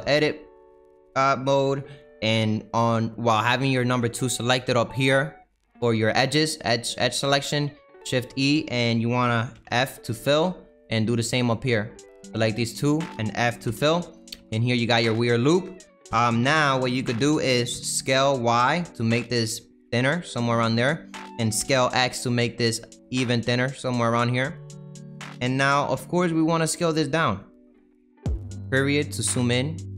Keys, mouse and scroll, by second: 0.0-6.8 scroll up 3, 6.8 click, 9.5 f, 10.8 click, 11.2 middle click, 11.7 click, 13.6 f, 14.0 middle click, 14.3 Tab, 14.5 scroll down 2, 14.8-17.7 middle drag, 17.7 s, 20.6-21.6 middle drag, 21.6 s, 25.9 s, 28.2 KP_Decimal, 29.0-29.3 scroll down 4, 29.3-29.9 middle drag.